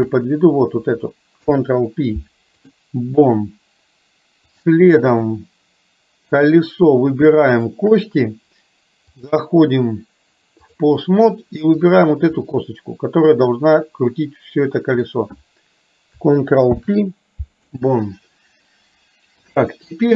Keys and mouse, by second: 1.4 ctrl+p, 4.6 click, 6.4 click, 7.6 shift+click, 9.2-10.8 drag, 12.4-15.1 middle drag, 16.7 ctrl+p, 19.6 KP_3.